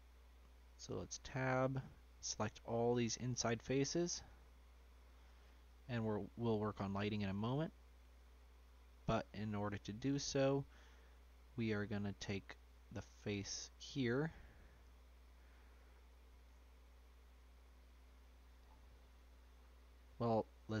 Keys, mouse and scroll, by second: 0.9 Tab, 1.7-2.9 drag, 3.3 shift+click, 3.9 shift+click, 4.2 shift+click, 4.6-5.2 scroll down 1, 5.2 shift+click, 5.9-6.2 scroll down 1, 6.2-7.7 shift+middle drag, 7.7 shift+click, 8.1 shift+click, 8.9 shift+click, 9.7 shift+click, 10.7 middle click, 11.5 scroll up 1, 11.6 shift+click, 12.3-14.0 middle drag, 14.0 ctrl+click, 14.3 ctrl+z, 14.8 ctrl+z, 15.2-18.6 middle drag, 18.6-20.8 scroll up 5.